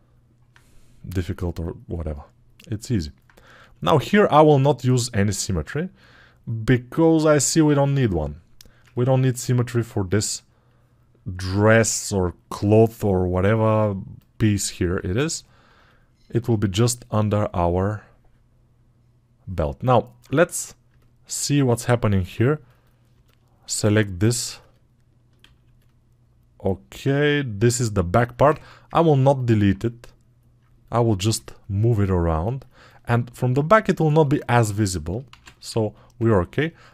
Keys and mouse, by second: 4.3-9.3 alt+right drag, 21.6-22.7 right drag, 22.7-32.6 middle drag, 28.5 ctrl+Tab, 32.6-36.9 alt+right drag.